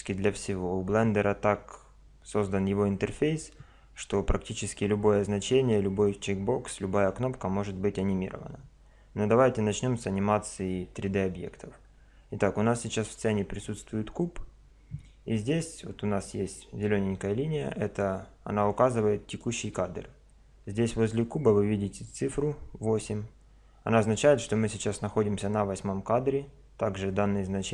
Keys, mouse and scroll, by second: 17.5 click.